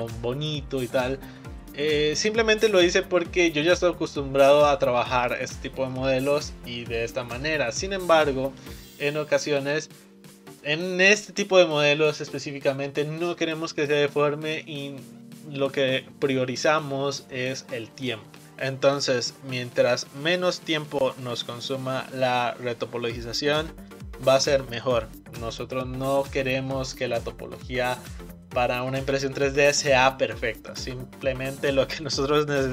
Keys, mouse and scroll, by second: 0.8-1.3 scroll down 2, 1.3-4.3 middle drag, 8.5-9.6 scroll down 1, 9.6-12.6 middle drag.